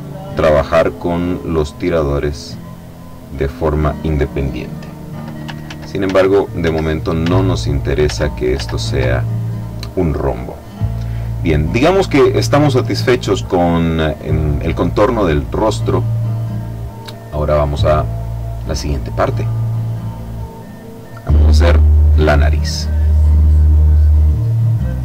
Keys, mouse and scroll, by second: 2.4-4.1 drag, 5.5 ctrl+z, 7.1 z, 7.9 z, 11.1-14.2 drag, 16.0-17.3 drag, 19.1 click, 22.5 click, 23.6 click.